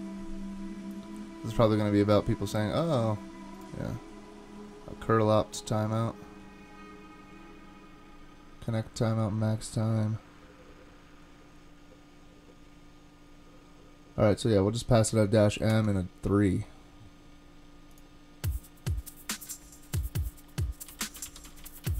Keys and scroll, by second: 0.0-0.1 typing, 9.3 typing, 15.7 super+Tab, 20.8-21.9 typing.